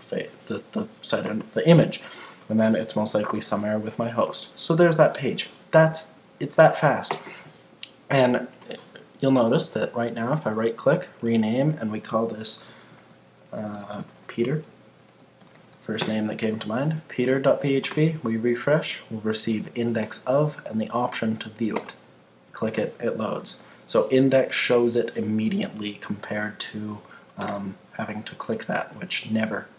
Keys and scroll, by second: 12.3 Left, 12.6 Right, 16.0 Return.